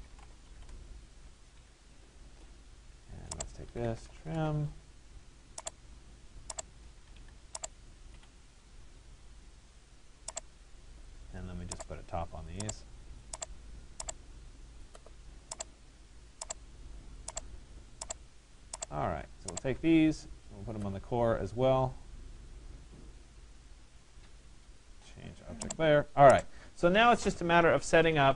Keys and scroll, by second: 0.2 2, 0.7 Return.